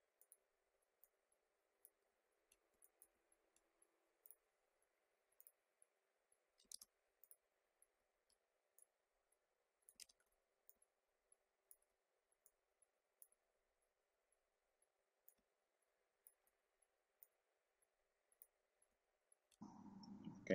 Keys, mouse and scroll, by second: 0.1-2.1 drag, 2.1 alt+scroll down 1, 2.7 space, 2.8 click, 2.9 space, 3.3 alt+scroll up 1, 4.2 click, 6.7 ctrl+z, 7.2 click, 8.1 alt+scroll down 1, 8.7-10.0 drag, 10.0 ctrl+z, 10.7-12.4 drag, 12.4-14.4 drag, 15.2-17.2 drag, 17.2-19.0 drag, 19.0 alt+scroll down 1.